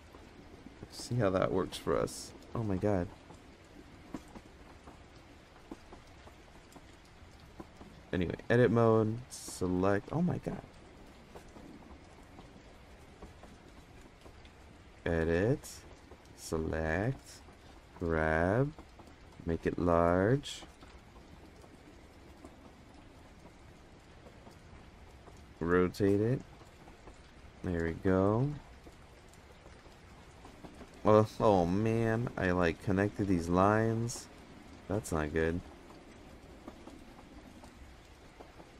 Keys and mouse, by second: 1.6 g, 4.2 Tab, 5.1 Tab, 5.9 Tab, 6.1 middle drag, 7.9-8.5 drag, 9.0-10.1 drag, 11.3 click, 12.8 click, 14.1-15.1 drag, 15.9-16.3 drag, 17.6 g, 19.7 s, 23.0 g, 26.2 r, 27.6-28.0 middle drag, 29.5 click, 31.9 click, 32.3 Tab, 36.3 click.